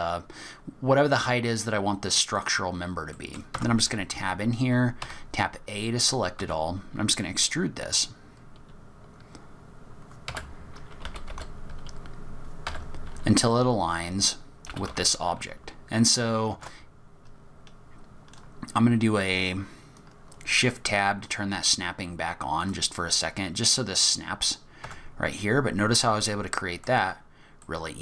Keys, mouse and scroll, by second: 3.1 middle click, 3.5 Tab, 5.0 a, 5.2-6.0 scroll up 8, 6.0 scroll down 2, 6.0 scroll down 3, 6.4 e, 10.6-11.0 scroll down 2, 11.0 g, 13.0-13.5 scroll down 4, 13.4-13.7 scroll up 2, 14.7 g, 24.8 Tab, 25.2-26.1 scroll up 6, 26.0 middle click, 27.2-27.6 scroll down 5, 27.6 middle click.